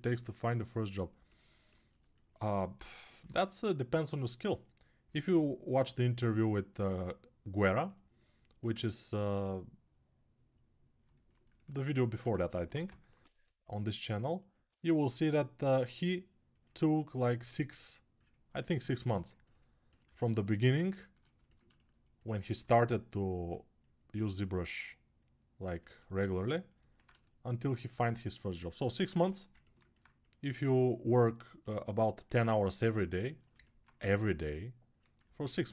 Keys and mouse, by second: 2.9 g, 7.7-10.8 right drag, 11.6 right click, 11.9 1, 12.6 [, 13.1 [, 13.2 [, 14.6 alt+click, 20.0 ctrl+alt+click, 25.5 ctrl+alt+right click, 25.7 ctrl+alt+right click, 28.1-33.0 alt+right drag, 29.0 3, 33.7 1.